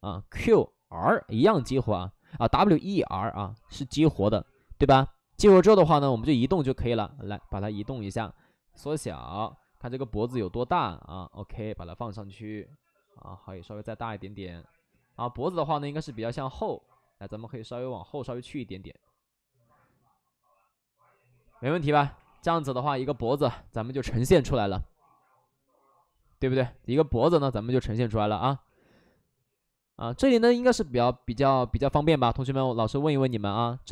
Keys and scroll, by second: 22.1 2, 22.2 2, 28.6 w, 30.3 ctrl+z, 32.1 ctrl+z, 33.3 2, 33.5 2.